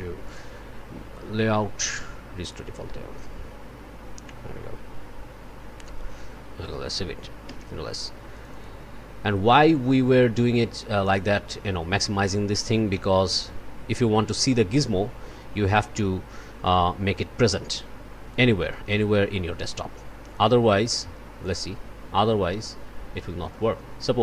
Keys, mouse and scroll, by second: 0.2 click, 2.4 click, 6.6 click, 7.5 ctrl+s, 8.3 click, 11.1 click, 12.0 click, 12.9 o, 15.9-18.5 drag, 19.6-20.6 drag, 21.4 click.